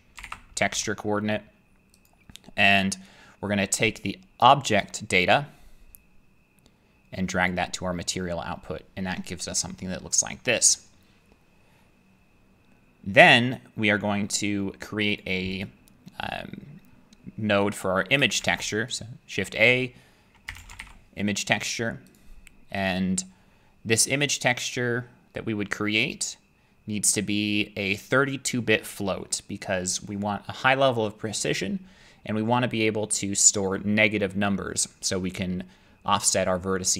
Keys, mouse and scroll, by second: 0.2-0.7 typing, 2.1 click, 14.3 middle click, 15.2 click, 15.6 click, 18.4 a, 19.0 click, 20.5-20.8 typing, 22.2 click, 22.9 click, 26.1 click.